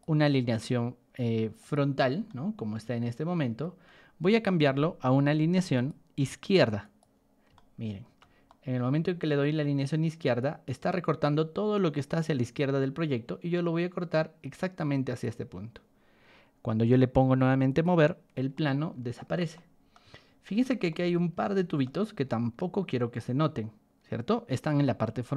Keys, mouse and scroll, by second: 1.5 click, 2.2-3.8 shift+middle drag, 5.7 click, 6.8 click, 7.5-8.1 shift+middle drag, 8.4 middle click, 10.3-15.2 drag, 17.6 click, 18.5 middle click, 19.5-19.9 middle drag, 20.2-20.8 scroll up 4, 20.8-21.8 shift+middle drag, 22.3-24.8 shift+middle drag, 25.0 middle click.